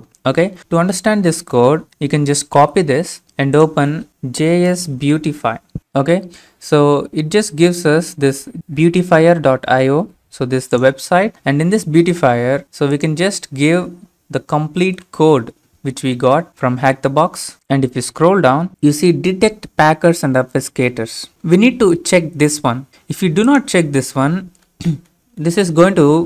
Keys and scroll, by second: 2.5 ctrl+c, 4.1-6.0 typing, 14.8 ctrl+v.